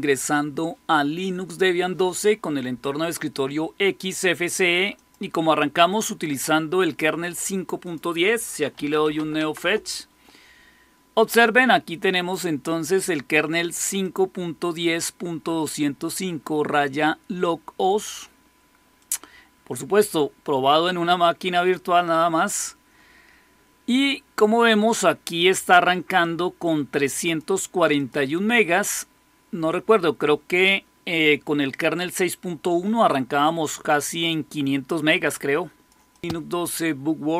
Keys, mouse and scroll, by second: 4.8 click, 7.2 click, 7.7 click, 8.4-9.5 typing, 13.9-18.0 drag, 18.9 click, 26.1-27.3 drag, 27.8 click, 35.1 click, 36.0 click.